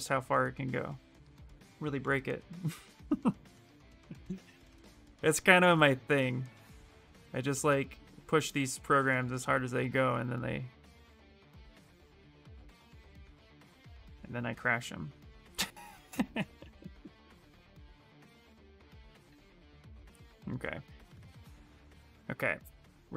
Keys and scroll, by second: 7.5 s, 19.1 s, 20.6-21.8 typing.